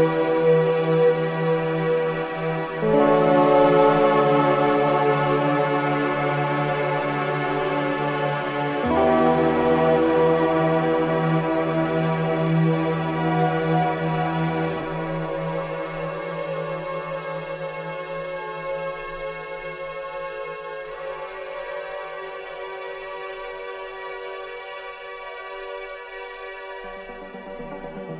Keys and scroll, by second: 2.9 ctrl+z, 5.6 shift+F2, 6.4 F9, 7.0 F9.